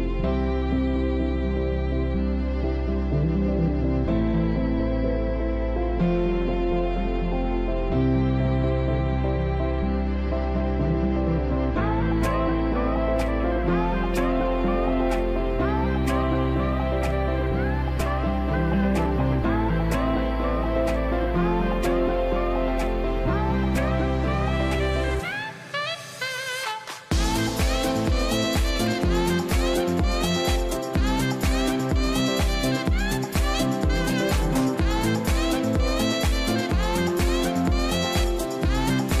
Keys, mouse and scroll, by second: 0.5 double click, 0.8 e, 1.2 w, 2.4 ctrl+z, 2.8 w.